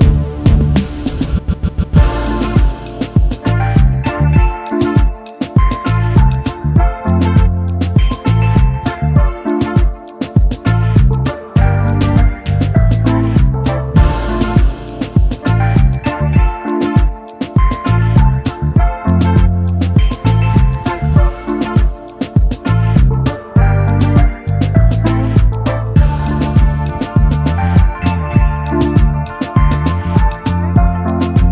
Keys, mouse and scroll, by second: 0.4-1.2 typing, 4.3 double click, 9.4 alt+shift+click, 12.5 ctrl+d, 12.7 ctrl+d, 14.5 double click, 16.0 ctrl+g, 16.7 shift+click, 25.1 alt+scroll up 1, 25.4-26.0 alt+scroll down 1, 28.1 right click, 29.8 Return, 30.6 shift+click.